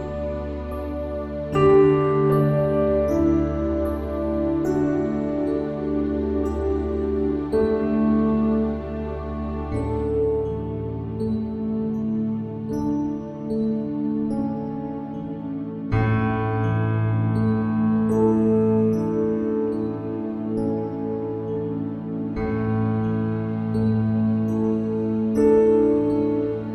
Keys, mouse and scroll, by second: 0.1 Tab, 0.8 g, 1.8 middle click, 2.0 Tab, 2.4 e, 3.3 ctrl+r, 3.8 s, 6.1 ctrl+b, 7.6 s, 8.9 middle click, 9.6 click, 10.9 e, 12.4 e, 13.1 e, 13.8 e, 16.0 middle click, 16.6 ctrl+r, 18.0 scroll up 1, 18.1 middle click, 18.7 middle click, 19.1 ctrl+r, 20.6 ctrl+r, 22.6 middle click, 22.8 ctrl+r, 23.8 ctrl+r, 25.0 ctrl+z, 25.4 middle click, 25.7 click, 26.0 middle click, 26.1 click, 26.2 middle click, 26.3 ctrl+b.